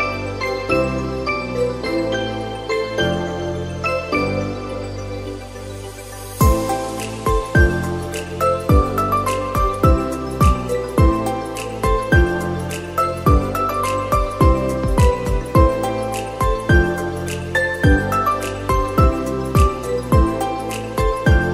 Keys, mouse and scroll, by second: 0.6 Tab, 0.9-1.3 scroll up 3, 1.3 click, 1.8 shift+click, 2.3 shift+click, 2.8 shift+click, 3.2 shift+click, 4.2 e, 5.4 ctrl+z, 7.5 g, 9.6 middle click, 10.4 a, 10.8 e, 14.3 s, 15.9 g, 17.7 click, 18.0-18.9 scroll up 1, 18.9 ctrl+r, 21.2 a.